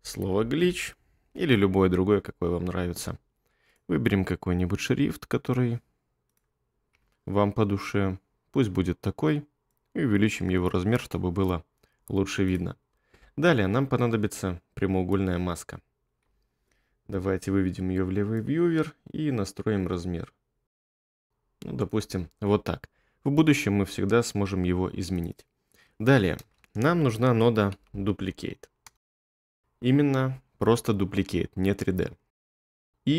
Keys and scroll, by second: 0.0-0.7 typing, 6.9 2, 16.2 1, 26.4 space, 27.5-29.0 typing.